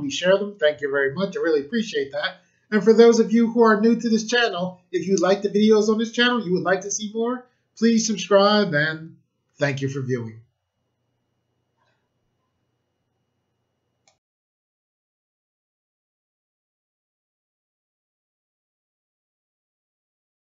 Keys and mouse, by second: 14.0 click.